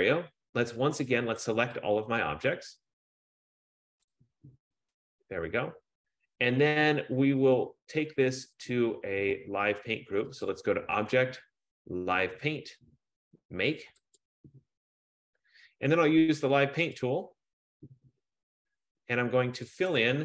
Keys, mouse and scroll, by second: 4.3 click, 4.8-9.3 drag, 10.6-12.2 drag, 14.4 click, 17.5 click, 19.8 click, 20.1 click.